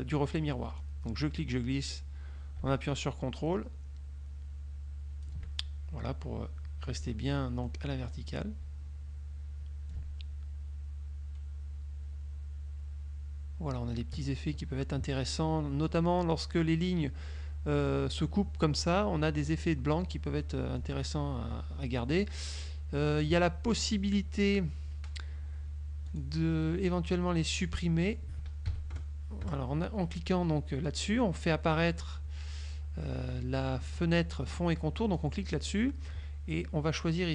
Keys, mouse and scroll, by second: 0.9-5.5 drag, 7.7 middle click, 10.0-15.2 ctrl+drag, 20.9 ctrl+click, 26.1 click, 28.8 KP_Subtract, 29.6 KP_Add, 35.3 click.